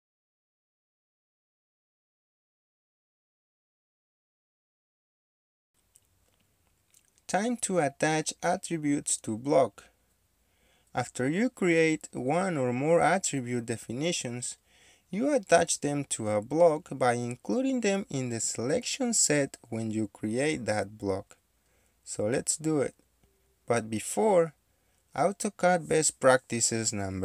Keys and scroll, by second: 4.9 Escape, 8.4 Escape, 11.4 Escape, 13.2 Escape, 15.0 Delete, 15.6 Delete, 17.8-18.3 typing, 18.6 Return, 21.1-25.1 typing.